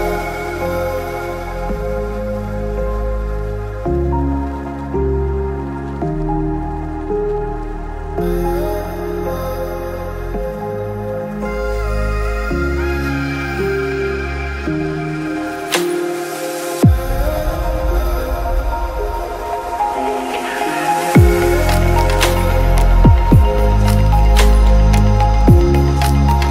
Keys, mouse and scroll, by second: 0.9 click, 1.2 KP_Decimal, 1.6 middle click, 1.6 click, 1.7 scroll down 1, 1.8 click, 3.2 middle click, 3.6 click, 3.7 alt+shift+d, 3.9 middle click, 4.1 click, 4.2 shift+s, 5.2 shift+click, 5.5 shift+s, 5.8 click, 6.1 click, 6.4 shift+click, 6.5 shift+s, 7.8 click, 9.5 shift+s, 10.0 middle click, 10.5 click, 10.9 alt+d, 11.1 click, 11.4 shift+s, 11.6 click, 12.0 click, 12.2 alt+d, 12.5 click, 13.2 click, 13.8 g, 14.8 shift+click, 15.6 middle click, 15.8 middle click, 17.1 shift+s, 17.4 middle click, 18.1 shift+middle click, 18.2 alt+d, 18.4 shift+s, 18.6 middle click, 19.0 click, 19.3 click, 19.7 click, 20.5 click, 20.7 click, 21.2 click, 21.7 click, 22.1 click, 22.2 g, 23.0 click, 23.5 click, 23.5 g, 24.8-26.5 typing, 24.9 click, 25.9 click, 26.4 Delete.